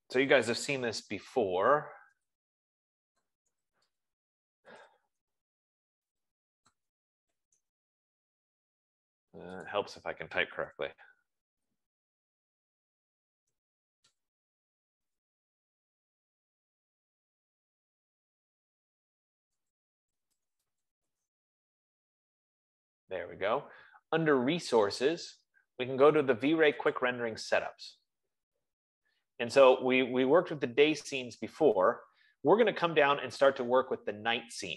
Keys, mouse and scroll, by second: 0.3 click, 0.8-9.8 typing, 10.9-22.1 typing, 14.1 click, 28.2 click, 29.1-30.3 scroll, 31.1-34.2 scroll, 34.2-34.7 scroll.